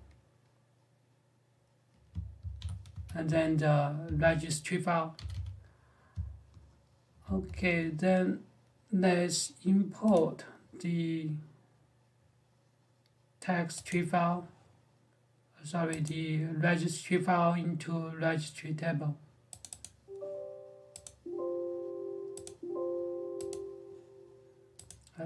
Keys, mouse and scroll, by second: 2.2 ctrl+w, 2.4 ctrl+h, 2.7 j, 3.0 o, 3.8 q, 4.9 g, 5.1 g, 7.0 alt+Tab, 9.9 click, 13.9 click, 15.8 click, 19.4 click, 22.6 click, 24.6 click.